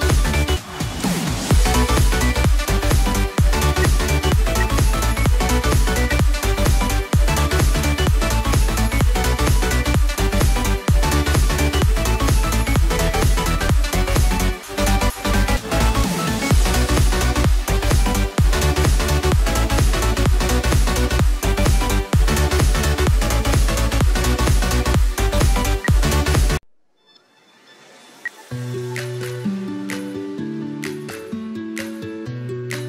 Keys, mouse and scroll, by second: 3.7 space, 4.9 typing, 6.3 right click, 25.7 space, 26.1 double click, 28.0 F2, 32.1-32.5 scroll down 1.